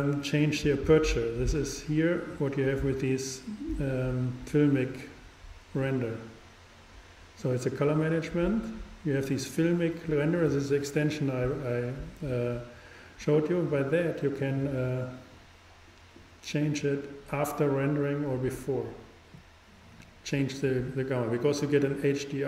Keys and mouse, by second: 14.0-15.6 drag, 19.6-22.4 drag.